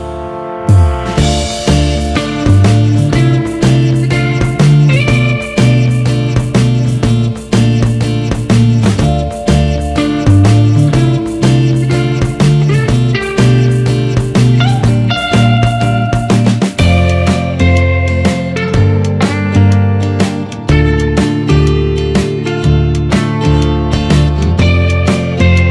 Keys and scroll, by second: 19.2 ctrl+-, 21.3 ctrl+=, 21.6 ctrl+space, 21.9 ctrl+=, 25.4 ctrl+z.